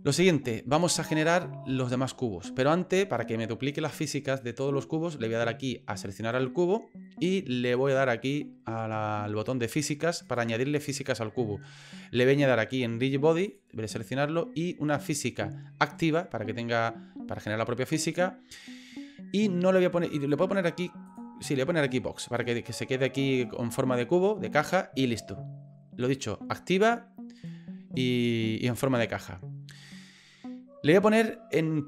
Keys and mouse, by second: 0.9 shift+middle click, 1.9 shift+middle click, 6.1 right click, 10.2 click, 13.4 click, 20.3 click.